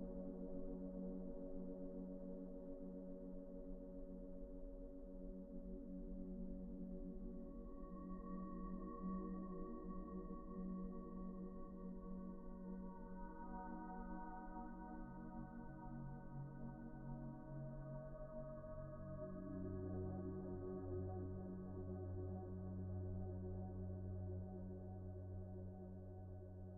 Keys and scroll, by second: 22.0 F4.